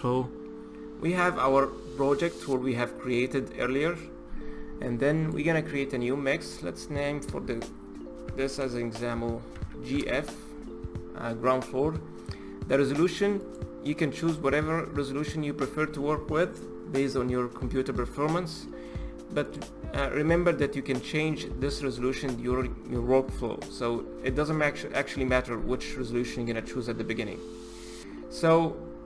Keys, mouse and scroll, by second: 0.0 click.